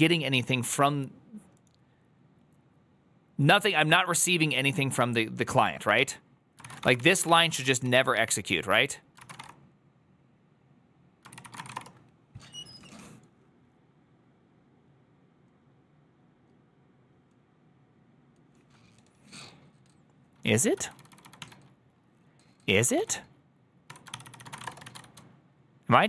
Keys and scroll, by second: 6.4-12.1 typing, 20.8-26.0 typing, 23.8 Tab, 24.0 ctrl+c, 24.1 ctrl+c.